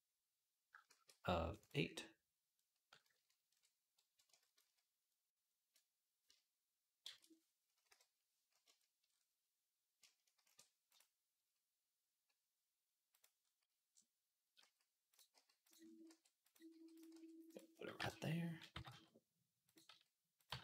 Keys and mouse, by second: 0.7 shift+a, 4.4 ctrl+z, 6.1-10.7 shift+drag, 6.9 shift+c, 7.7 KP_3, 10.2 shift+a, 10.7-20.6 middle drag, 12.9 click, 14.4-18.5 typing, 19.7 s, 20.3 g.